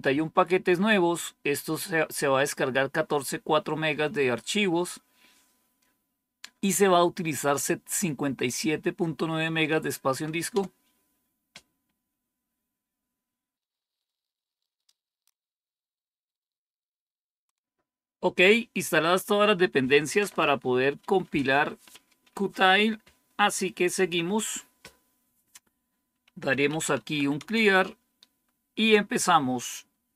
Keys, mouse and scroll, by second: 10.4 Return, 26.1-27.5 typing.